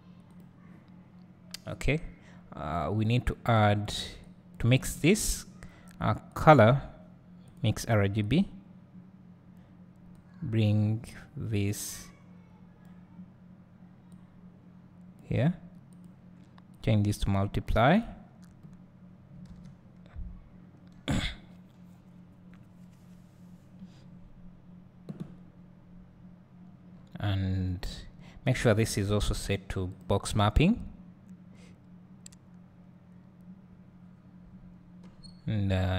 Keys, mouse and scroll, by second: 6.4 click, 10.2-33.1 drag, 20.6 s, 35.2 scroll up 1.